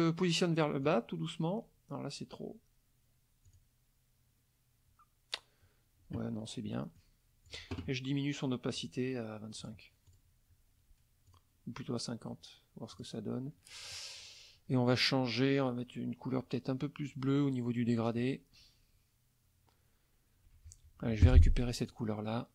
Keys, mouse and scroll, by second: 0.8 click, 3.5 click, 7.0 shift+click, 8.8 right click, 9.6 click, 10.1 click, 11.3 click, 12.2 click, 12.9 click, 21.3 F7, 21.9 click.